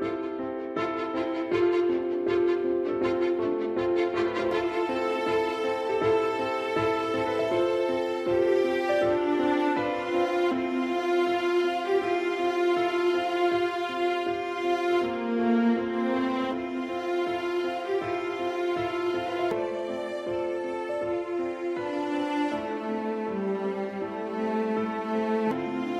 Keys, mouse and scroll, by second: 0.2 a, 0.5 right click, 0.9 click, 1.8 ctrl+z, 2.4 a, 3.1 alt+right click, 3.6 click, 6.8 middle click, 8.5 s, 10.0 click, 10.4 middle click, 12.2 e, 14.6 click, 14.8 middle click, 17.4 a, 18.0 alt+right click, 18.6 click, 19.8 middle click, 22.5 middle click, 23.3 s, 24.2 click, 24.5 middle click, 25.8 a.